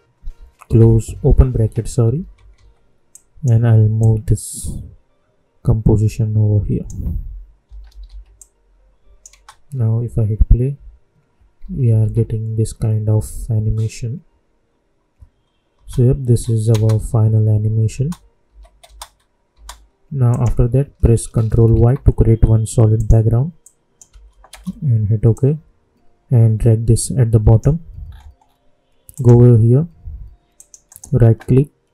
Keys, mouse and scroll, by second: 0.6 alt+[, 3.0-7.6 drag, 7.6 typing, 8.3 click, 9.3 space, 11.5 -, 13.9 typing, 15.7 space, 18.4 n, 18.8 space, 20.2 click, 21.7 ctrl+y, 22.9 click, 24.0 Return, 25.3-28.0 drag, 28.0-29.1 scroll up 1, 29.1 click, 30.8 right click.